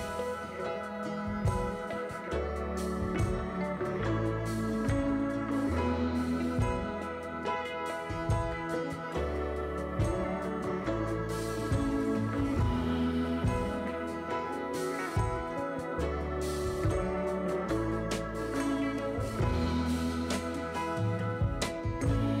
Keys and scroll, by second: 14.8-17.6 typing, 19.4 ctrl+z.